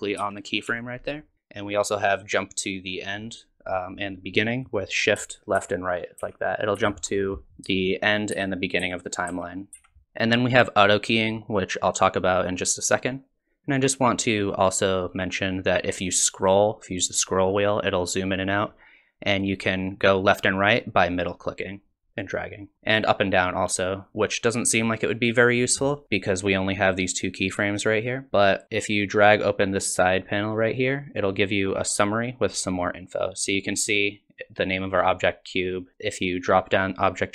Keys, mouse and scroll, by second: 0.2 Down, 0.7 Up, 5.6 shift+Right, 6.2 shift+Left, 6.8 shift+Right, 7.5 scroll down 5, 8.3 shift+Left, 8.8 shift+Right, 9.3 shift+Left, 9.7 shift+Right, 16.3-16.8 scroll up 4, 17.0-17.4 scroll down 5, 17.4-17.8 scroll up 3, 17.8-18.3 scroll down 3, 18.3-18.7 scroll up 3, 18.7-19.5 scroll down 2, 19.5 middle click, 22.7 middle click, 24.3 middle click, 30.1 click, 32.6 click.